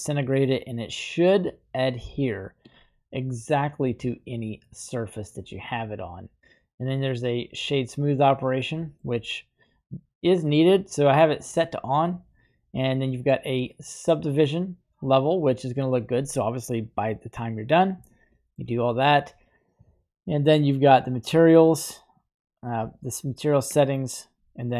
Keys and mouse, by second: 3.2-4.0 middle drag, 4.7-5.0 middle drag, 7.4 click, 8.8 middle click, 10.8 click, 11.6 click, 14.2 click, 15.8 click, 18.2 shift+middle click.